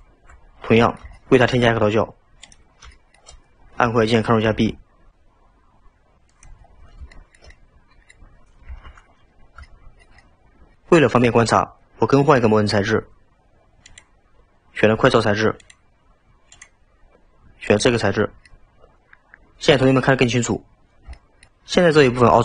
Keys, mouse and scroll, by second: 0.7-2.5 middle drag, 2.5 click, 3.0-4.7 shift+middle drag, 4.7 ctrl+b, 6.7-7.2 scroll down 2, 7.2-8.8 shift+middle drag, 8.8 Tab, 9.0-9.7 scroll up 2, 9.7-10.8 shift+middle drag, 13.9-16.9 drag, 18.5-20.9 middle drag, 20.9-21.2 scroll up 1, 21.2-22.4 shift+middle drag.